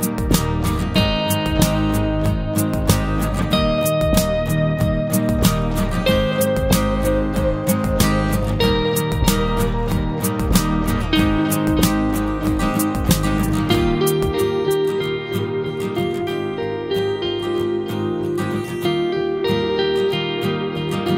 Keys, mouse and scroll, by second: 1.3 ctrl+z, 2.7 Delete, 4.2 middle click, 4.4 scroll down 1, 4.6 middle click, 5.2-5.6 scroll up 2, 5.6 shift+middle click, 5.9-6.4 shift+scroll up 1, 6.4 click, 8.2 Delete, 8.9-11.9 middle drag, 11.9-12.3 scroll down 1, 12.3-13.3 middle drag, 13.3-14.7 scroll up 3, 14.7 click, 15.7 click, 17.2 Delete, 18.4 alt+a, 19.3-21.1 drag.